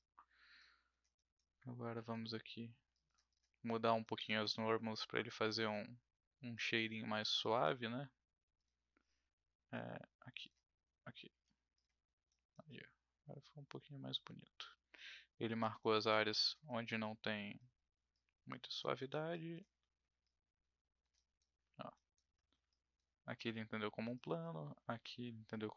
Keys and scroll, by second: 11.4 w.